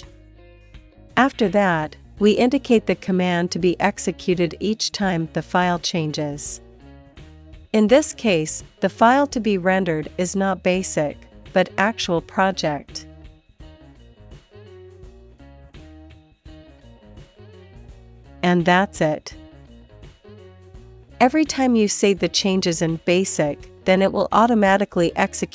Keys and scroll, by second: 7.6 Left, 8.3 Left, 8.5 shift+Tab, 10.3 Left, 10.4 Left, 14.4-18.4 typing, 20.3 alt+Right, 20.5 alt+Right, 20.6 alt+Right, 20.8 alt+Right, 22.0 Return.